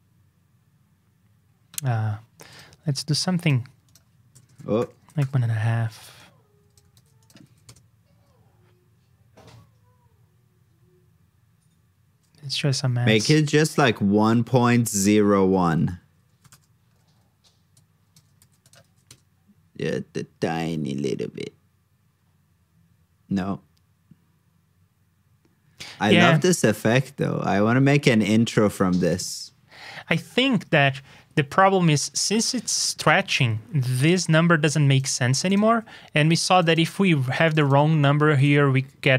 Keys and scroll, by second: 6.9 super+c, 7.4 super+v, 18.3 super+c, 18.8 super+v.